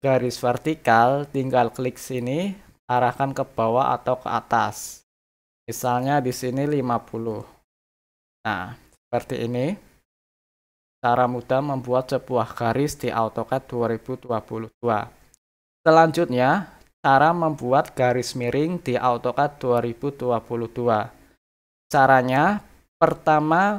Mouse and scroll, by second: 2.0 click.